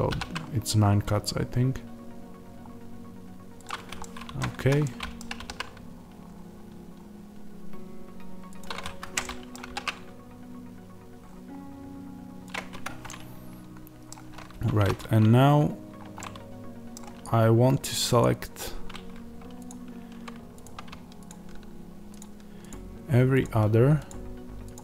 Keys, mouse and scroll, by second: 0.0 ctrl+r, 4.6 Escape, 4.8 middle click, 5.3 ctrl+r, 8.9 Escape, 9.2 middle click, 9.6 ctrl+r, 12.8 Escape, 13.0 middle click, 14.5 1, 16.1 middle click, 18.1 click, 19.6 ctrl+click, 20.5 click.